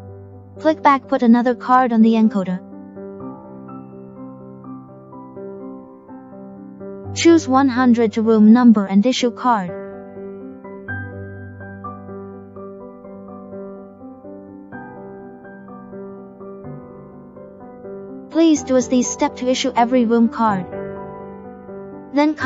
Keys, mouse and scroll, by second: 6.6 click, 10.6 click, 13.6 click, 15.8 click, 18.6 click.